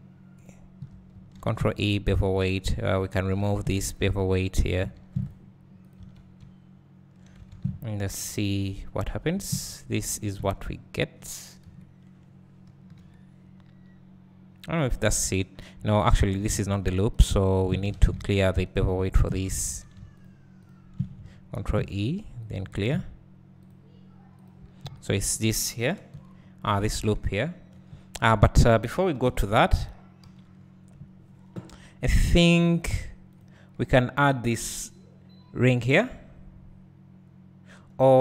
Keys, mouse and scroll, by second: 1.8 ctrl+e, 2.4 click, 3.9 ctrl+e, 5.3 ctrl+e, 6.0 Tab, 8.8-9.4 drag, 9.4 alt+a, 11.6 KP_1, 13.0 KP_3, 16.6-17.2 alt+drag, 18.1 ctrl+z, 18.5 alt+shift+click, 19.4 `, 20.2 alt+shift+click, 22.0 ctrl+e, 23.8 ctrl+e, 24.4 click, 25.1 alt+click, 26.1 KP_1, 26.9 KP_2, 28.5 scroll down 1, 29.2 KP_1, 30.2 KP_3, 31.9-32.6 scroll down 3, 33.4 click.